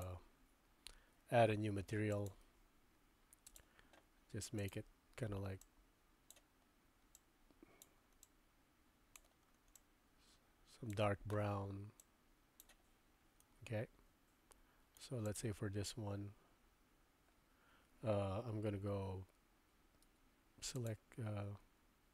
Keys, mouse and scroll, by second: 0.0 click, 2.1 click, 3.6-3.9 drag, 4.6 drag, 12.0 click, 13.4-15.0 middle drag, 15.2 click, 20.1 Tab, 20.7 click, 21.6 Tab.